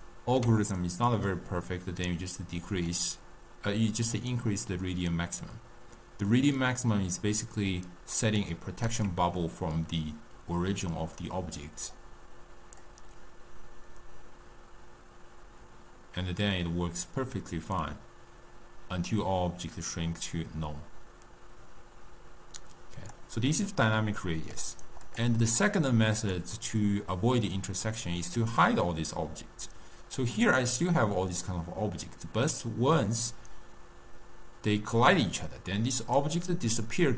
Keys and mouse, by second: 3.0-6.1 drag, 13.0-16.0 drag, 23.8-25.2 middle drag, 25.2-27.6 drag, 27.6-30.3 middle drag, 30.3-33.3 drag.